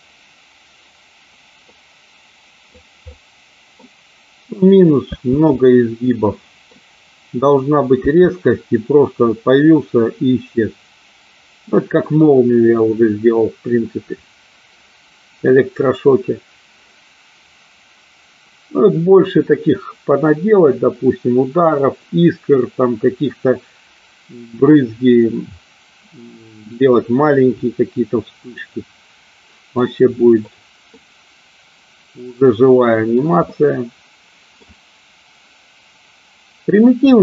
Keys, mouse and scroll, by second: 1.7-2.9 middle drag, 3.1-3.9 middle drag, 5.1 space, 5.7-6.7 middle drag, 7.9 space, 28.6-29.9 middle drag, 31.0-33.4 middle drag, 33.5-34.8 middle drag.